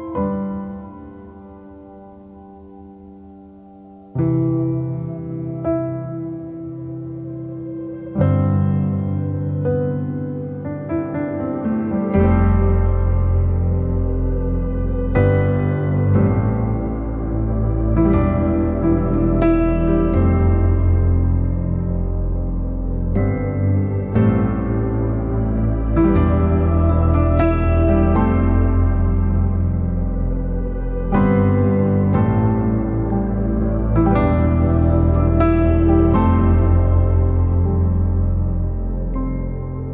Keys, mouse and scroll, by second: 0.1 /, 2.4 ctrl+s, 3.0-3.4 scroll up 1, 3.4 middle click, 4.2 scroll up 1, 4.4-5.8 shift+middle drag, 5.8 shift+a, 7.4 alt+middle click, 9.4 r, 13.2-13.5 scroll up 1, 13.5 middle click, 13.7 scroll up 1, 14.3-16.7 shift+middle drag, 16.7-19.7 right drag, 19.7-23.6 drag, 23.6 middle click, 24.5-28.5 drag, 28.5-30.4 right drag, 30.4 click, 30.8 middle click, 31.7-33.0 drag, 34.0 middle click, 34.2 scroll up 1, 34.6 shift+middle click, 35.4 click, 35.9-37.4 middle drag, 37.4 click, 39.2 click, 39.8 middle click.